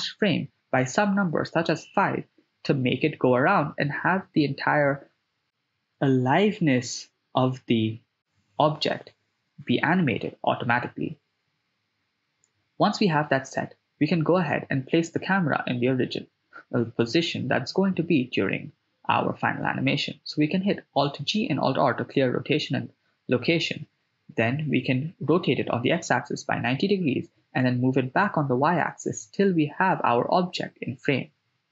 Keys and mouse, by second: 1.4 shift+space, 8.4 shift+space, 12.2 KP_0, 14.0 right click, 15.0 click, 17.3 alt+r, 18.7 alt+g, 20.0 r, 20.3 x, 21.0 9, 21.1 0, 21.5 Return, 23.8 g, 24.1 y, 29.0 click.